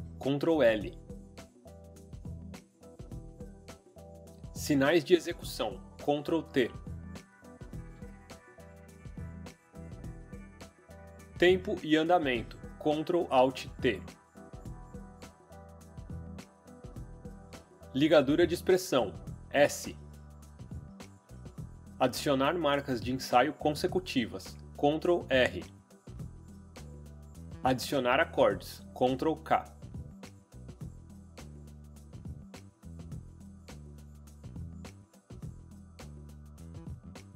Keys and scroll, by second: 0.5 ctrl+l, 1.2-4.2 typing, 7.5 ctrl+t, 13.3 ctrl+alt+t, 19.4 s, 24.9 ctrl+r, 29.7 ctrl+k, 30.0-31.6 typing, 33.4-34.6 typing.